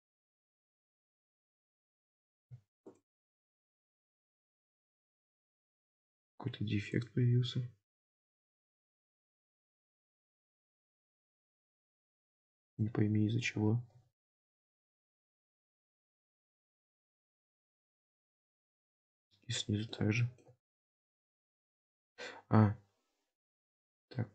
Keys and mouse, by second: 0.7 click, 1.0 middle click, 3.7 shift+click, 4.9 middle click, 5.5 Tab, 6.1 Tab, 6.6 1, 6.9 click, 8.0 g, 12.6 middle click, 14.0 KP_7, 16.3 g, 17.6-20.0 middle drag, 20.2 shift+middle click, 20.6 alt+z, 21.7-24.2 middle drag.